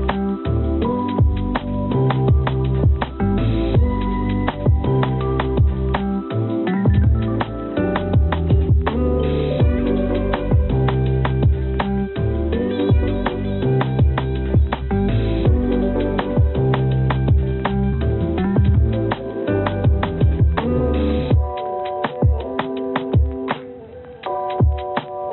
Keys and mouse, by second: 1.0-3.1 drag, 4.5-5.7 drag, 6.8 click, 10.0 click, 11.4 shift+d, 17.6 click, 19.4 ctrl+d, 20.3 g, 24.0 click.